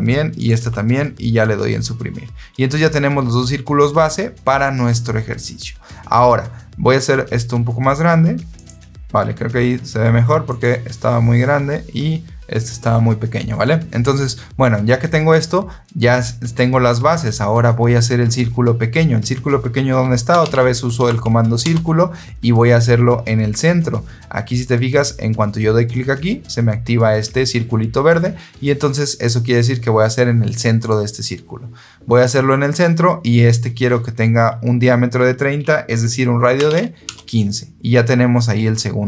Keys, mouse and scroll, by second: 0.3 click, 0.4 Delete, 8.5 click, 10.4 click, 20.0-20.9 typing, 21.5 Return, 30.7 click, 36.5 KP_1, 36.6 KP_5, 37.0 KP_Enter.